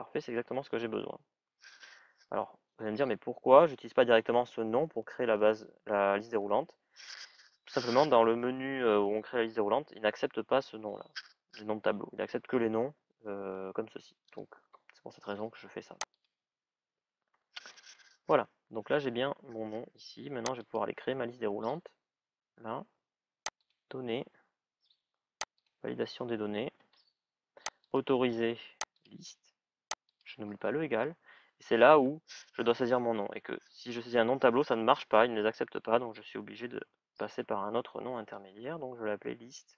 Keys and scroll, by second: 36.4 shift+l.